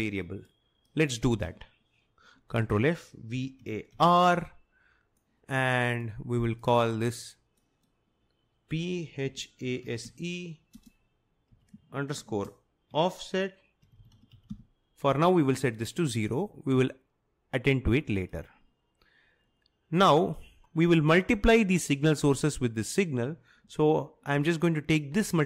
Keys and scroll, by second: 2.7 ctrl+f, 3.1-4.6 typing, 8.5-15.0 typing.